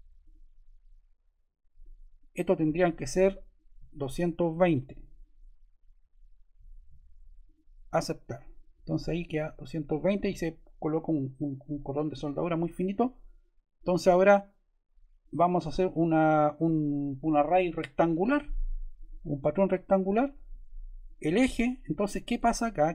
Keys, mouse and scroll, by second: 0.1 click, 2.6 click, 4.2-5.3 typing.